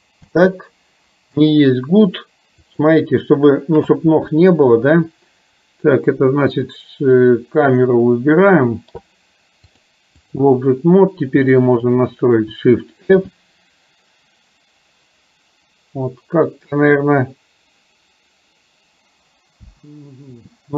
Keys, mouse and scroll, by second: 0.3 space, 2.9 click, 9.8 click, 11.4 click, 13.2 shift+f.